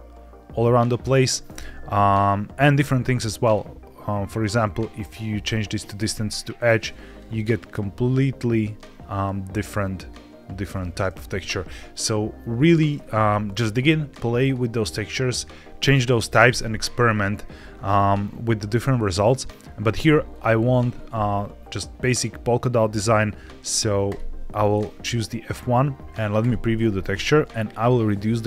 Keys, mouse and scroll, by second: 3.3-5.1 drag, 6.5 click, 7.6 click, 9.1-10.5 drag, 12.8-14.3 scroll up 3, 14.3 click, 17.8-19.2 scroll down 1, 19.2 middle click, 20.2-24.2 drag, 26.3 ctrl+shift+click, 27.7-28.4 drag.